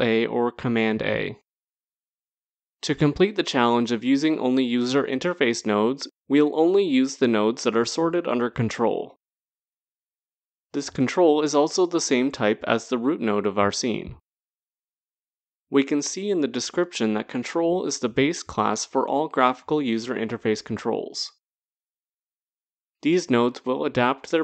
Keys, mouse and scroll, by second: 0.9 ctrl+a, 5.4 click, 17.5 click, 21.8 click.